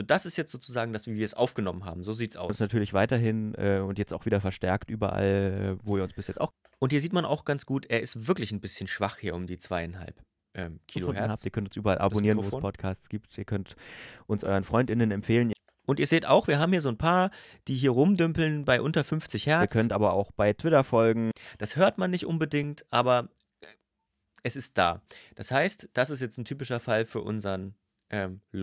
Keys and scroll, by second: 2.3 space, 6.3 space, 10.7 space, 15.3 space, 19.4 space, 21.1 space.